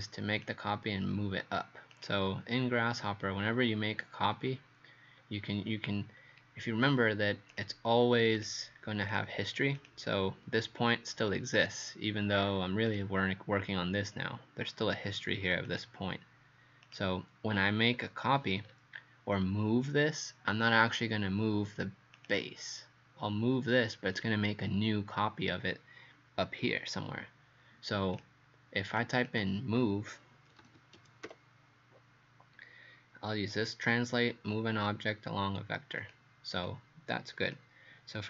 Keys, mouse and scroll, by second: 2.0 click, 3.4 scroll up 2, 4.3 scroll down 2, 5.2-5.8 scroll up 1, 6.2 scroll down 1, 7.5 click, 9.8 click, 12.9 click, 18.0 scroll down 2, 18.6 scroll down 1, 22.2 click, 29.3 click, 30.3-31.8 typing, 36.0 click, 36.7 click.